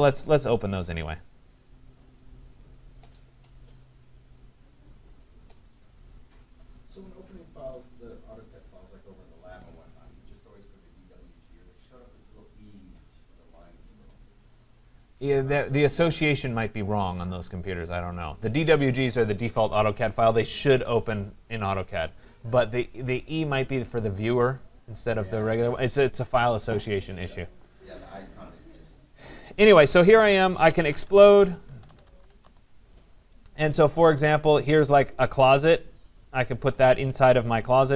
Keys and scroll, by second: 32.4 Return.